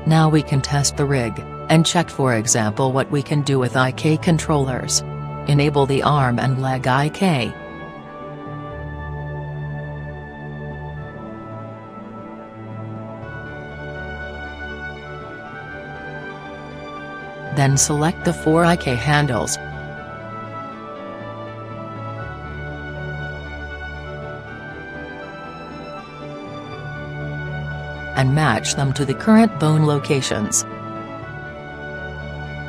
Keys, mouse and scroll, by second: 2.2-4.0 middle drag, 5.3-7.3 middle drag, 9.2-11.0 drag, 12.9-14.7 drag, 15.5-18.6 drag, 20.0-21.8 drag, 23.9-25.4 right drag, 25.8-29.8 right drag, 30.7-32.6 drag.